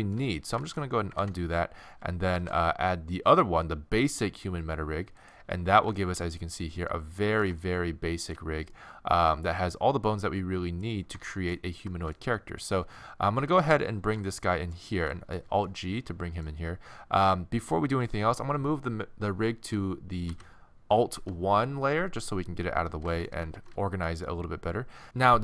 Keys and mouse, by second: 0.4 middle click, 1.3 ctrl+z, 2.4 shift+a, 6.0 middle click, 6.2 middle click, 8.1 middle click, 12.0-14.0 middle drag, 14.0 alt+g, 14.6 middle click, 15.5 z, 20.3 m, 23.1 middle click, 23.6 alt+shift+1.